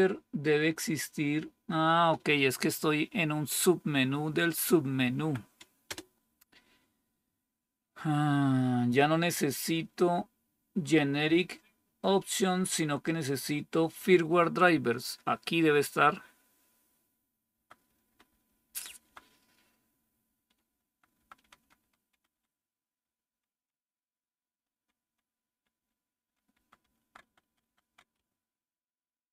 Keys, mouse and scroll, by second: 5.1 Right, 5.8 Return, 17.4 Down, 17.7 Down, 18.2 Down, 18.4 Down, 18.7 Down, 18.9 Down, 20.2 Down, 20.4 Down, 20.5 Down, 20.8 Down, 21.1 Down, 21.5 Down, 22.2 Down, 22.2 Down, 22.9 Down, 23.2 Down, 23.4 Down, 24.7 Down, 24.9 Down, 25.7-27.1 Down, 27.3 Down, 27.6 Down, 27.7 Down, 28.1-29.3 Up.